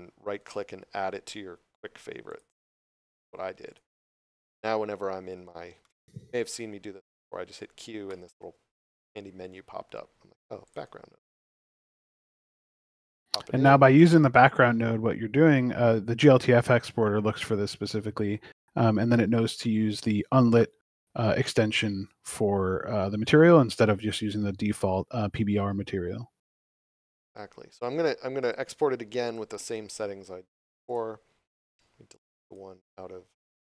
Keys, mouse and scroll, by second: 0.4 right click, 2.3 click, 4.9 scroll down 1, 5.8 shift+middle click, 6.5 scroll up 1, 8.1 q, 10.6 click, 16.5 scroll up 1, 17.8 middle click, 19.5 shift+middle click, 22.2 click, 27.7 click, 31.6 right click, 32.4 click.